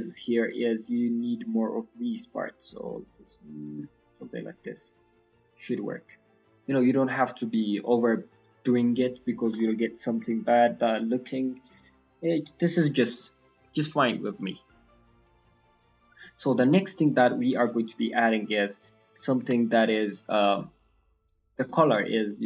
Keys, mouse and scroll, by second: 0.3-0.8 scroll up 4, 1.0 click, 2.7 click, 6.4 click, 6.4-7.7 scroll down 5, 6.7 middle click, 7.4 middle click, 7.9-9.2 scroll down 19, 9.4 middle click, 9.6-11.1 scroll up 7, 9.9 click, 10.2 middle click, 10.8 middle click, 11.4-12.3 scroll down 3, 11.6 middle click, 15.3 scroll down 3, 15.6 middle click, 16.1 middle click, 16.7-17.0 scroll down 1, 17.0 middle click, 17.0-17.5 scroll up 6, 17.6-19.4 scroll down 6, 17.9 click, 19.4 g, 21.6 middle click.